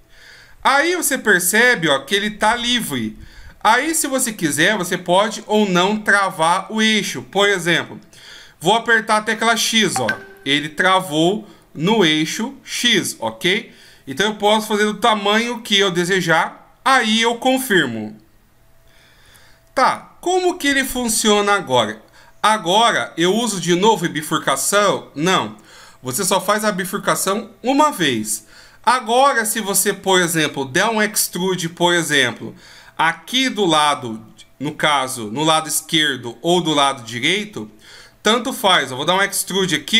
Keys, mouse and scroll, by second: 23.9 right click.